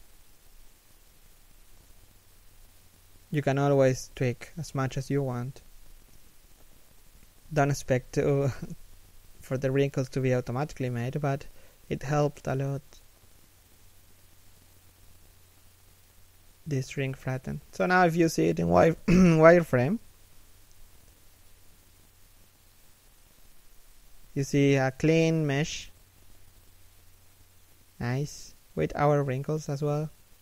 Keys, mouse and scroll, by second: 0.6 alt+s, 3.0 z, 3.4 alt+w, 3.9 alt+s, 6.2 Tab, 6.3 a, 6.6 right click, 6.7 g, 7.9 right click, 8.0 g, 8.9 z, 9.4 middle click, 11.2 3, 11.5 1, 12.3 z, 13.0 Tab, 13.7 alt+right click, 14.0 alt+shift+right click, 14.4 z, 14.5 w, 16.3 scroll down 1, 16.5 z, 17.0 shift+middle click, 20.7 right click, 21.5 g, 22.3 right click, 22.5 shift+right click, 22.6 g, 24.4 scroll up 1, 26.1 z, 27.1 scroll down 1, 27.4 shift+middle click, 27.7 middle click.